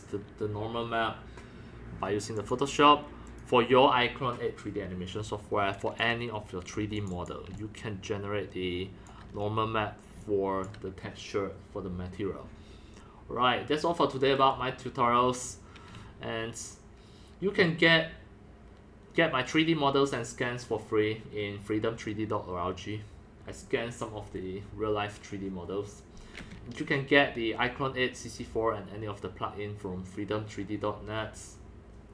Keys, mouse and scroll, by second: 3.3 click, 5.1-5.5 scroll down 3, 5.5-6.0 scroll up 2, 6.0 click, 6.0 scroll, 6.9 click, 7.1 click, 7.5-9.1 drag, 7.5-9.2 c, 9.3 scroll, 9.3 scroll up 2, 9.6 scroll, 9.7 scroll down 1, 10.2 c, 10.2-10.6 drag, 10.7 click, 10.7 c.